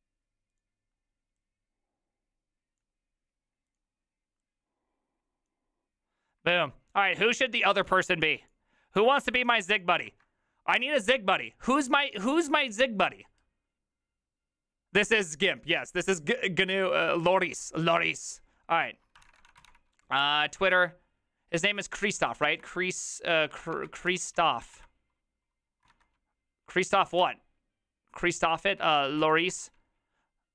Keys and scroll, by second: 10.3 alt++, 19.1-20.2 typing, 20.2 Return, 22.0-30.0 typing, 28.7 ctrl+shift+Left, 28.8 ctrl+shift+Left.